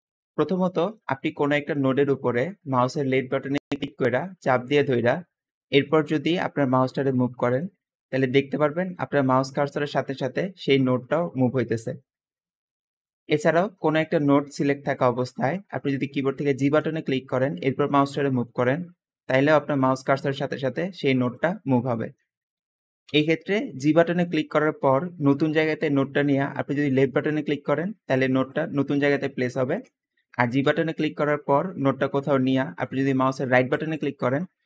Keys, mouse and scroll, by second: 0.3 middle click, 0.3-1.0 scroll up 2, 3.5-6.6 drag, 8.0 click, 9.3 click, 10.7 click, 11.9 click, 13.3-14.1 scroll down 2, 14.6-15.9 middle drag, 14.6-15.1 scroll up 2, 15.1-15.9 scroll down 2, 16.5 g, 22.9 g, 26.8 click, 27.8 `, 29.5 Escape, 30.5 g.